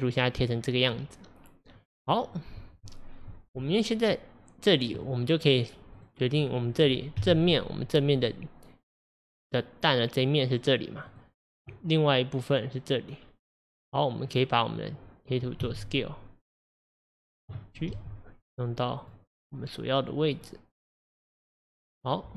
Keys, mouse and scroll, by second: 6.0 click, 6.4 middle click, 7.2 KP_1, 8.1 click, 11.1 click, 14.7 click, 15.7 s, 17.9 g, 20.6 click.